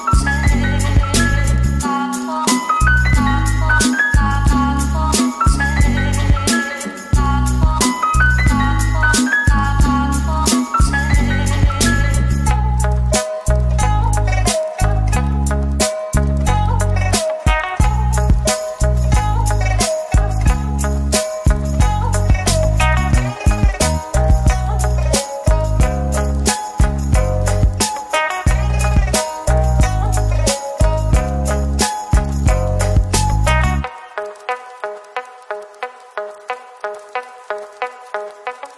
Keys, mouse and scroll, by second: 0.9 double click, 2.8 typing, 6.5 middle click, 8.7 typing, 13.6 Tab, 14.0-14.7 typing, 15.1 ctrl+r, 15.9 double click, 17.2 typing, 18.3 typing, 19.5-20.9 typing, 21.6 Return, 23.4-25.5 typing, 25.7 Return, 26.5 shift+click, 27.2 middle click, 27.7 typing, 29.4 typing, 32.2 middle click, 35.4 middle click, 38.0-38.7 typing.